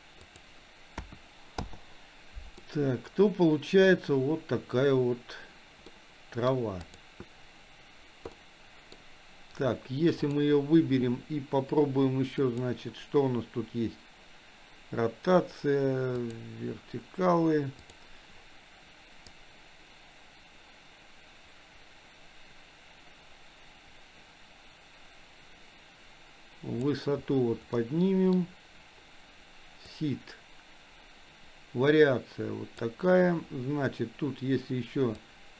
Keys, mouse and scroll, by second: 0.3-1.7 drag, 2.7-3.9 middle drag, 6.0 middle click, 6.8 click, 8.3 middle click, 10.2 click, 12.4 click, 16.1 click, 17.9 click, 19.3-26.8 drag, 27.8 middle click, 29.8-33.0 drag, 35.3-35.5 drag.